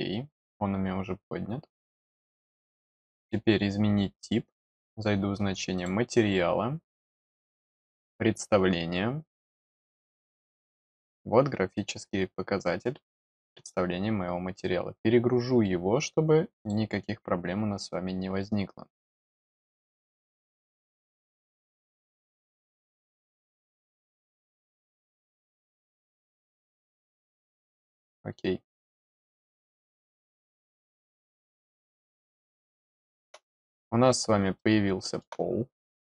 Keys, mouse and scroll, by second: 3.0 click, 4.5 click, 5.7 click, 7.8 click, 13.5 click, 16.5 click, 21.2 click, 21.4 click, 23.4 click, 23.6 click, 24.3 click, 24.5 click, 25.0 click, 25.9 click, 26.1 click, 27.4 click, 28.8 click, 29.8 click, 30.9 click, 32.6 middle click, 33.4 middle click, 34.5 middle click, 35.6 middle click.